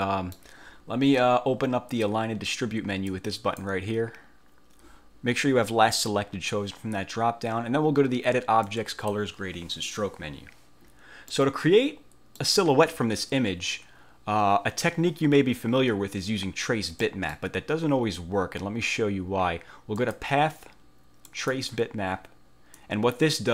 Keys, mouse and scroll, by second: 3.3 click, 8.8 click, 11.5-12.7 middle drag, 17.1 middle click, 20.1 click, 21.4 click, 22.9-23.5 drag.